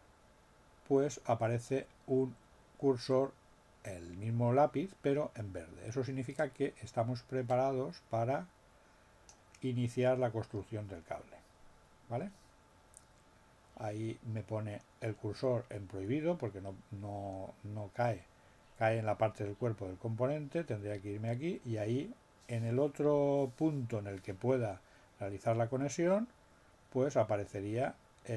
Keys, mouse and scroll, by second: 6.4-9.4 drag.